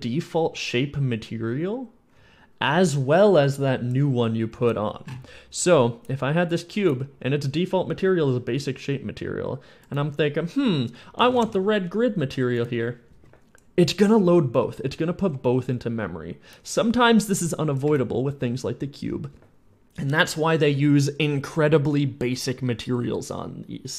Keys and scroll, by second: 4.4 s, 11.0 r, 11.1 e, 11.3 d, 14.0 w, 14.4 a, 15.1 w, 17.7 s.